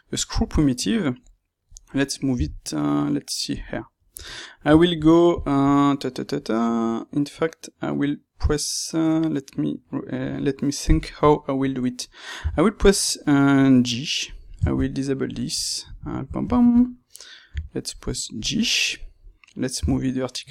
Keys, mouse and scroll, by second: 2.2 g, 3.5 click, 3.6-14.3 middle drag, 4.1 Tab, 12.3 g, 14.3 click, 14.7 shift+Tab, 14.8-18.4 middle drag, 17.4 g, 18.4 click, 18.5-20.5 middle drag, 19.7 g.